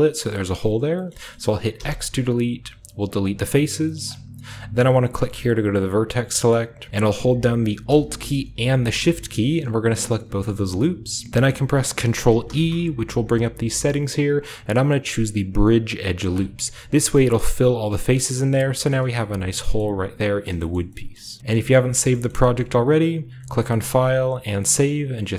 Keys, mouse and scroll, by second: 1.2-3.1 shift+scroll up 1, 1.3-3.1 shift+middle drag, 1.7 typing, 3.2 click, 3.9 typing, 5.7 click, 8.9-10.5 alt+shift+right drag, 10.7 middle click, 11.3 ctrl+z, 11.3-12.4 scroll up 1, 12.4 ctrl+e, 16.3-18.2 drag, 16.6-18.2 scroll up 1, 17.1-18.5 middle drag, 18.2-18.9 scroll down 1, 18.9 middle drag, 18.9 Tab, 19.7-20.1 middle drag, 19.7-20.1 scroll down 2, 20.4 shift+middle drag, 20.5 shift+scroll up 2, 20.7-22.0 shift+middle drag, 20.8 shift+scroll down 2, 21.4-22.3 shift+scroll up 1, 22.2-23.5 shift+middle drag, 24.0-25.3 drag.